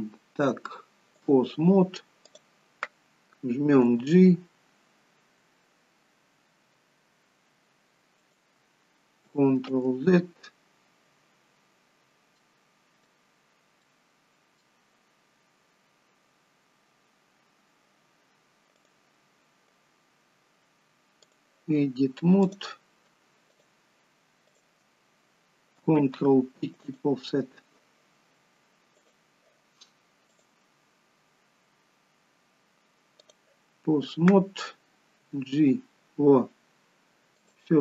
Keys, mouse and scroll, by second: 2.4 click, 4.0 g, 12.1 ctrl+z, 12.1-12.5 scroll down 2, 12.5 middle click, 13.5 scroll up 3, 14.0 middle click, 15.2 scroll down 1, 18.9 click, 22.6 click, 23.7 shift+click, 25.6 shift+click, 26.2 ctrl+p, 29.2 click, 30.4 click, 36.5 g.